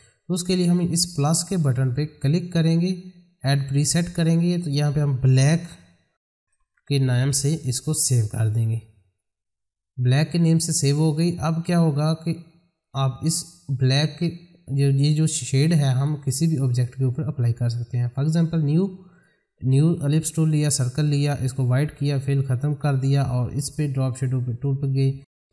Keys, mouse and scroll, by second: 2.2 click, 6.1-7.1 typing, 8.9 click, 11.5-12.4 scroll down 1, 12.8-15.9 drag, 16.0-20.5 drag, 22.6 right click, 24.5 click.